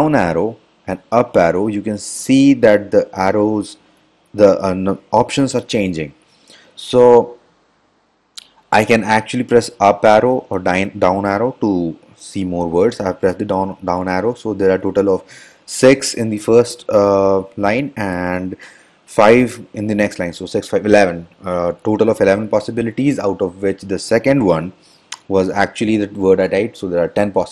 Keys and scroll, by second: 1.4 Up, 9.8 Up.